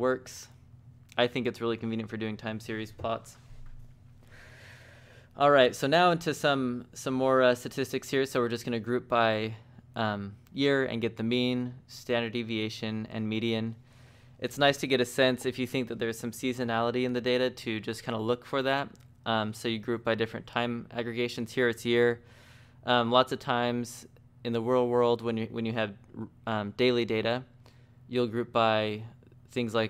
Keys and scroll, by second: 3.6 Escape, 6.7 z, 7.0 t, 8.8-9.8 typing, 23.0 shift+v, 24.3 j.